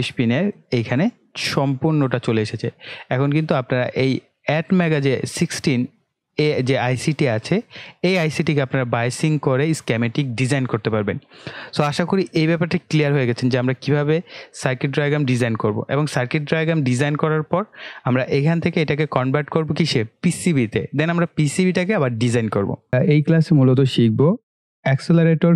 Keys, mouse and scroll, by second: 3.5-16.1 drag.